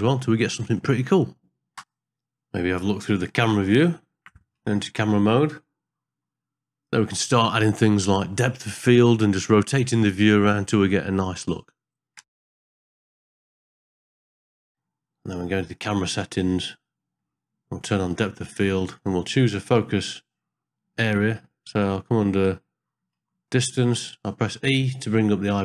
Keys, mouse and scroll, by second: 0.3 shift+click, 0.7 ctrl+middle click, 1.0 ctrl+middle click, 3.7 click, 4.8 KP_0, 4.9 KP_0, 7.0 KP_0, 9.3 n, 10.6 click, 11.8 click, 12.5 Home, 12.7 middle click, 13.0 ctrl+middle click, 13.3 middle click, 13.5 shift+middle click, 13.8 ctrl+middle click, 14.0 shift+middle click, 14.1 ctrl+middle click, 14.6 ctrl+middle click, 15.8 click, 16.7 middle click, 18.1 click, 23.2 e.